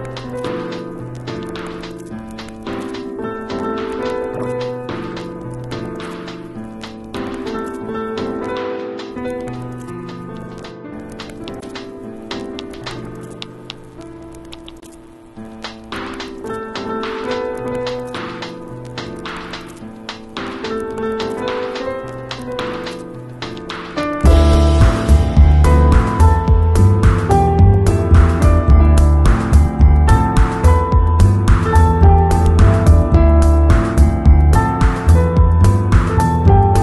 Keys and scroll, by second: 4.6 z, 5.9 v, 21.9 super+i, 23.2 z, 27.8 b, 28.5 [, 30.5 x.